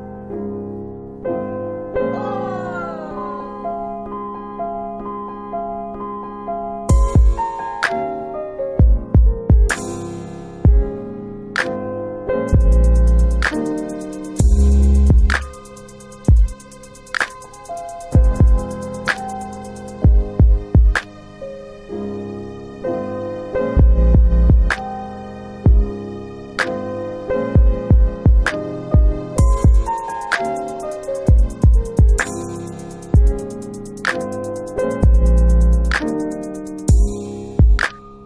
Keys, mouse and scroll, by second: 3.1 click, 3.2 click, 4.1 alt+click, 4.5 alt+click, 5.9 alt+click, 7.0 click, 7.1 click, 9.5 right click, 10.7 click, 16.4 alt+click, 17.0 alt+click, 17.5 alt+click, 17.9 alt+click, 18.1 alt+click, 18.5 alt+right click, 18.8 alt+middle click, 18.8 alt+double middle click, 20.7 click, 22.0 click, 22.6 click, 23.5-25.0 typing, 25.0 Return, 34.5 click, 35.0 click, 35.3 click, 36.9 click.